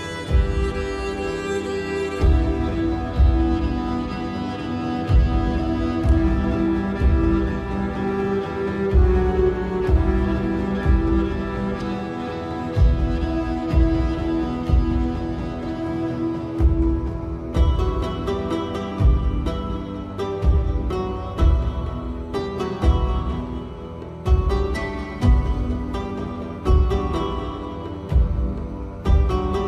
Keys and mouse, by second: 0.8 s, 3.8 g, 6.0 g, 8.4 s, 18.5 shift+click, 19.9 shift+click, 21.0 Tab, 21.6-23.1 drag, 23.7 KP_7, 28.3 click.